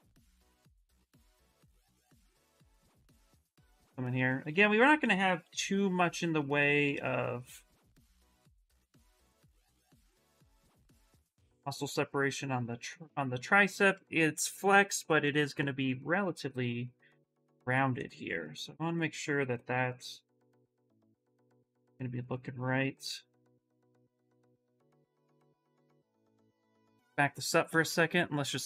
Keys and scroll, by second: 4.2 ctrl+z, 4.4 ctrl+z, 5.3 shift+d, 7.4 d, 9.2 d.